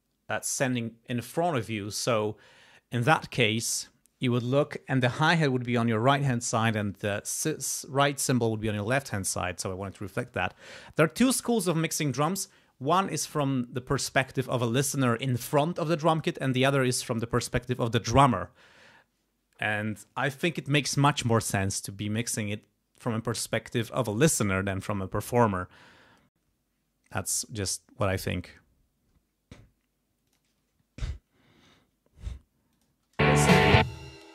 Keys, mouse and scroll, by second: 30.2 click, 32.7 click, 33.1 space, 33.8 space.